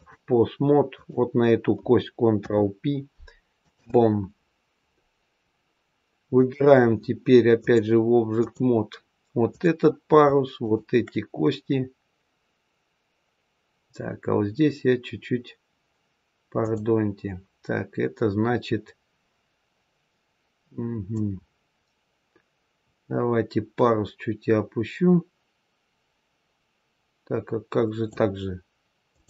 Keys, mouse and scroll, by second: 0.8 click, 2.3 ctrl+p, 6.3 click, 7.5 click, 9.4 click, 10.5 shift+click, 16.5 click, 21.0 click, 29.0 click.